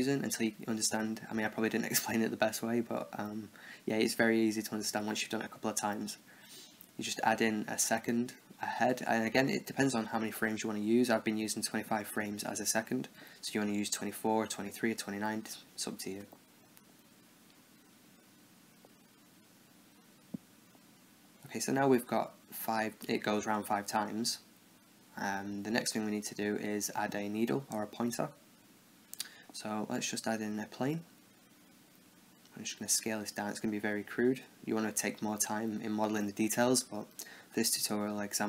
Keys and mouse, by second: 1.2 Left, 3.6 i, 4.7 Right, 5.7-7.2 drag, 7.2 0, 8.7 i, 10.3 Right, 10.5 Right, 10.7 Right, 10.9-12.0 Right, 12.2 Right, 12.4 Left, 13.7 i, 14.7 Right, 17.7 i, 18.9-20.3 Right, 20.9 click, 28.2-31.2 drag, 29.8 shift+a, 32.6 s, 33.2 Tab, 33.5 a, 33.6 b, 34.1 click, 34.9-37.7 typing, 38.1 ctrl+r.